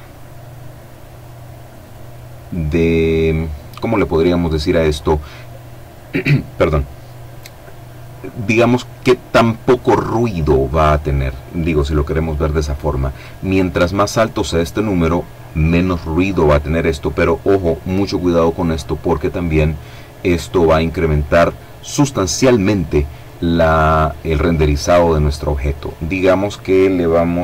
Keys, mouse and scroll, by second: 1.0 click, 4.1 click, 25.0 click.